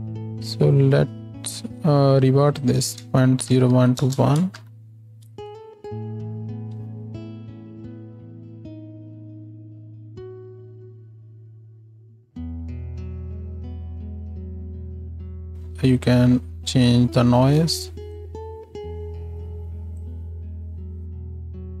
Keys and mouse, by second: 0.3 z, 4.6 shift+Left, 5.3 space, 7.7 ctrl+space, 9.3 space, 10.5 space, 12.2 space, 15.5 ctrl+space, 17.6 space.